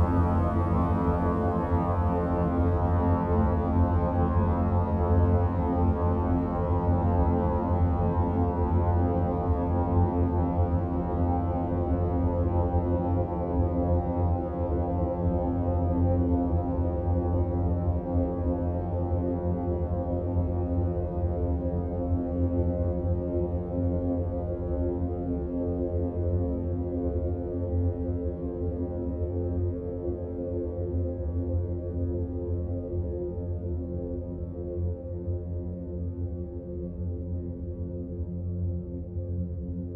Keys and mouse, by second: 7.6-8.7 drag, 10.6 click, 13.5 g, 17.3 r, 19.0 g, 22.1 click, 24.8 Tab, 26.1-27.7 middle drag, 29.8 click, 31.3 h, 31.8 click, 32.6-33.9 middle drag, 34.9-38.0 middle drag.